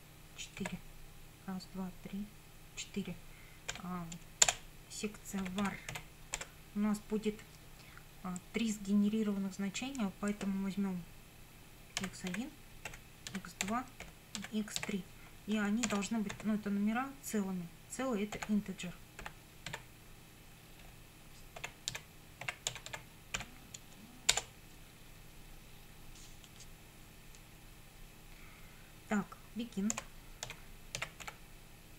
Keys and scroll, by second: 0.6 4, 3.7 ;, 4.5 Return, 5.2-6.4 typing, 12.0-16.4 typing, 18.4 i, 19.2 n, 19.7 r, 20.8-23.9 typing, 24.3 Return, 29.9-31.9 typing.